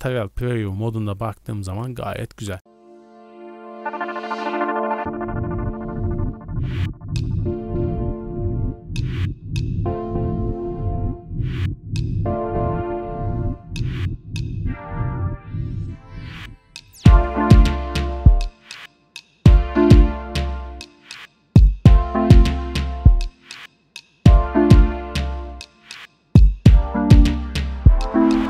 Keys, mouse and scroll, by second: 0.4 scroll down 1, 1.7 a, 1.9 a, 2.7 click, 4.0-9.8 typing, 4.3 KP_Enter, 5.0 click, 5.2 click, 5.7 scroll up 4, 5.7 shift+middle click, 6.0 shift+middle click, 6.7 right click, 6.9 ctrl+click, 7.1 shift+middle click, 7.2-7.9 scroll up 4, 7.4 shift+middle click, 7.7 right click, 7.8 shift+middle click, 8.0 right click, 8.5 scroll up 5, 8.7 scroll down 1, 8.7-9.1 scroll down 4, 8.8 shift+middle click, 9.0 right click, 9.1 shift+middle click, 9.3 scroll up 1, 9.6 click, 9.9 shift+middle click, 9.9 scroll up 3, 10.0 shift+middle click, 10.3 click, 10.9-13.8 typing, 11.1 KP_Enter, 11.7 middle drag, 11.8 middle click, 12.2 ctrl+click, 12.5 shift+middle click, 12.7 click, 13.0 right click, 13.3 click, 13.6 scroll down 3, 13.7 shift+middle click, 13.8-14.3 scroll up 4, 14.2 shift+middle click, 14.5 shift+middle click, 14.6 scroll down 1, 15.1 click, 15.8-17.7 typing, 16.3 KP_Enter, 16.4 click, 16.6 click, 16.9 click, 17.2 click, 17.4-18.2 scroll up 5, 17.5 shift+middle click, 17.6 right click, 17.8 click, 17.9 shift+middle click, 18.2 shift+middle click, 18.3 scroll down 1, 18.5 click, 19.4 KP_0, 19.7 s, 19.8 click, 19.9 middle click, 19.9 scroll up 2, 20.0 shift+middle click, 20.2 shift+middle click, 21.2-22.2 drag, 22.4 click, 22.7 scroll down 3, 22.8 scroll up 2, 23.4 click, 24.6 shift+middle click, 24.9-26.6 typing, 25.0 scroll down 2, 25.1 shift+middle click, 25.4 scroll up 1, 25.6 right click, 25.9 middle drag, 26.1 scroll up 1, 26.2 middle drag, 26.5 click, 26.8 scroll down 1, 28.0 click, 28.0 x, 28.1 scroll up 3.